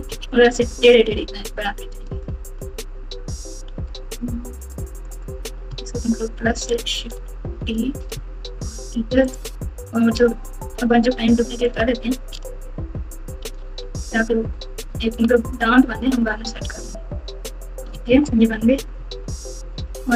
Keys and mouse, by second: 0.0-0.4 typing, 1.6 KP_1, 2.6 Tab, 3.7 alt+z, 4.9 click, 6.0 ctrl+KP_Add, 7.5 shift+d, 10.9 shift+d, 13.4 shift+d, 17.9 alt+z, 18.7-20.0 typing.